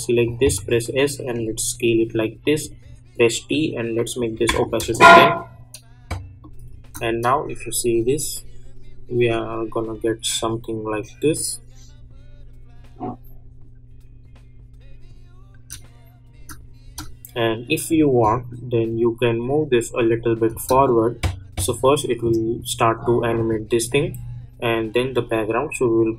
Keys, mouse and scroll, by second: 0.2 click, 0.5 s, 1.3-3.1 drag, 3.1 t, 4.1 click, 4.7 Return, 6.4 click, 6.8 space, 15.5 space, 17.9-20.5 drag, 20.5 space.